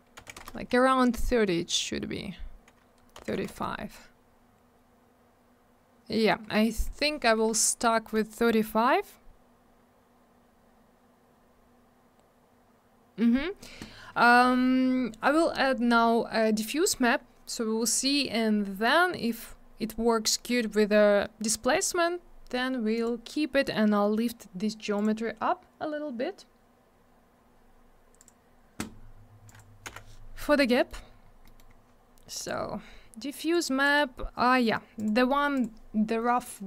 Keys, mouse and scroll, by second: 0.2 3, 0.3 Return, 3.5 Return, 7.7 scroll down 1, 22.9 click, 23.0 click, 24.9 click, 25.0 click, 28.2 click, 28.2 click, 29.4 click, 29.5 click, 30.7 middle click, 30.9 middle click, 31.0-31.3 scroll down 1, 31.4 middle click, 31.5 middle click, 31.7-32.4 scroll up 1, 32.4 click, 32.4 click, 33.5 click, 34.9 click, 35.0 click, 35.5 click, 35.6 click, 36.4 click, 36.5 click.